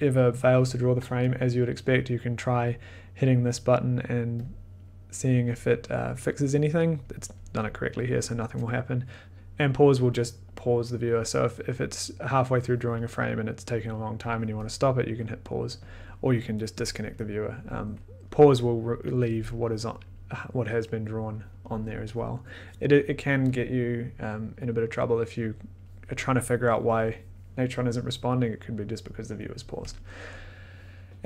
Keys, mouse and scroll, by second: 0.6 click, 2.7 click, 3.5 click, 4.4 click, 5.5 click, 15.2 click, 15.8 click, 16.8 click, 21.0 click.